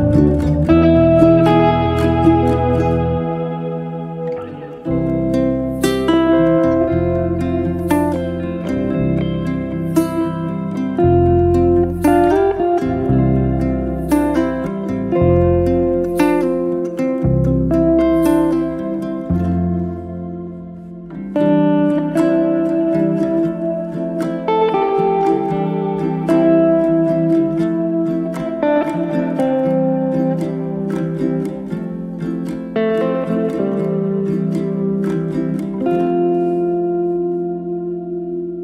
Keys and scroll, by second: 1.0 t, 5.6 t, 5.9 KP_Decimal, 6.1 5, 6.6 Return, 9.2 KP_Decimal, 9.3 5, 9.8 Return, 11.1 r, 16.0 e, 21.6 space, 24.3 space, 24.7 Delete, 28.5 p, 29.8 0, 30.2 Return, 30.8 space, 34.2 m.